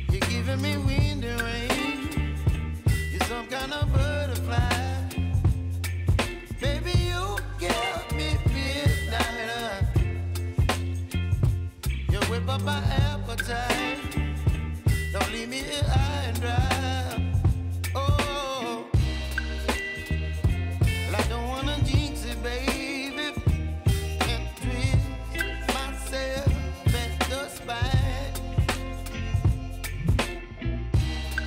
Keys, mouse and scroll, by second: 0.3 scroll up 1, 1.2 click, 1.5 ctrl+v, 2.5 click, 3.9 u, 4.8 ctrl+z, 5.9-9.5 drag, 9.5-13.5 drag, 19.6 space, 21.4-31.4 drag.